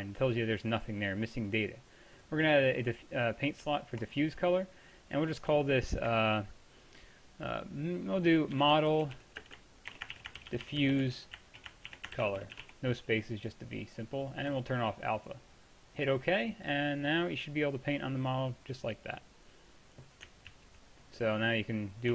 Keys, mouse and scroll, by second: 10.9 f, 16.7-17.2 middle drag, 17.2-20.6 drag, 20.6 ctrl+z, 21.1 click, 21.2 middle drag, 21.3-21.9 drag.